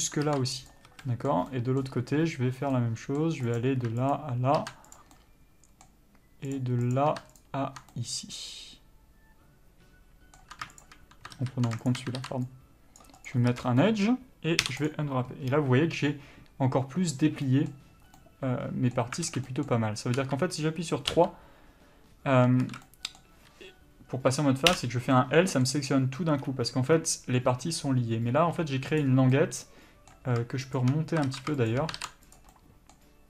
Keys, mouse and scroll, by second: 0.0 middle click, 1.0 ctrl+e, 1.2 a, 1.3 middle click, 2.3-3.0 scroll up 1, 3.0 middle click, 3.8 click, 4.4 ctrl+click, 5.2 ctrl+e, 5.4 middle click, 6.8 click, 7.7 ctrl+click, 8.2 middle click, 11.1 shift+click, 11.6 ctrl+z, 12.2 shift+click, 13.6 ctrl+e, 13.8 a, 13.9 scroll down 1, 14.1 middle click, 15.2 u, 18.5 middle click, 19.6 alt+a, 19.8 middle click, 20.4 3, 21.4 l, 22.9 alt+a, 23.1 middle click, 25.0 l, 25.5 middle click, 28.9 2, 29.2 click, 29.6 middle click, 31.1 shift+click, 31.6 ctrl+z, 32.0 shift+click, 32.6 ctrl+e, 32.8 middle click.